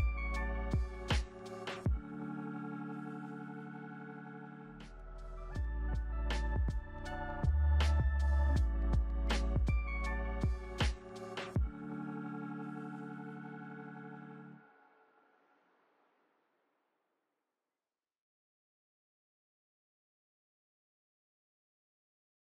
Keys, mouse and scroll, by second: 0.4 ., 0.7 5, 0.8 Return.